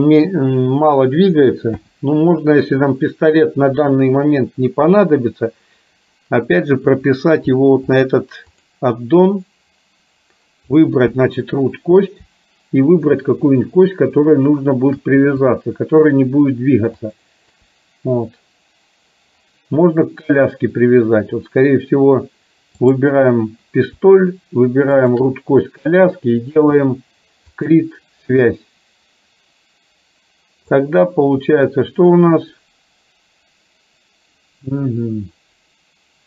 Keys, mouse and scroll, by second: 1.8 n, 8.7 click, 17.3 shift+click, 22.8 click, 25.0 shift+click, 27.7 click, 30.9-36.2 drag.